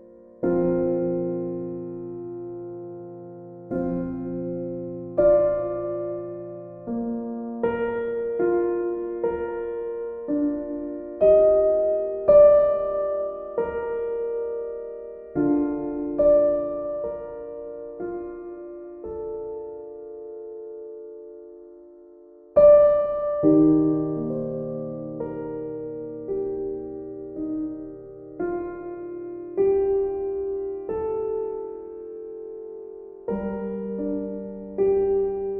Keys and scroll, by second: 29.1 e.